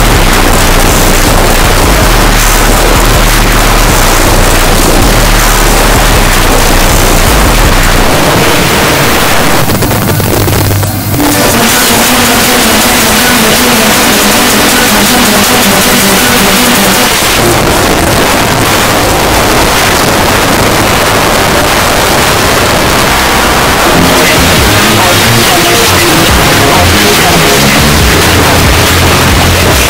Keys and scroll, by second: 17.1 Page_Down, 29.8 space.